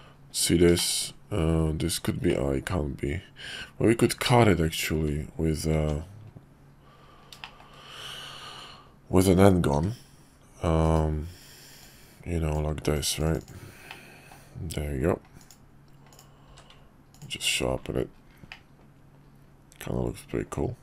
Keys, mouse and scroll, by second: 0.3 Tab, 0.7 shift+middle click, 2.3-4.1 middle drag, 4.9 `, 5.7 Tab, 7.4 shift+middle click, 9.7 d, 11.8-12.5 drag, 13.9-14.4 middle drag, 15.4 click, 16.1 click, 16.5 q, 18.5-20.8 middle drag.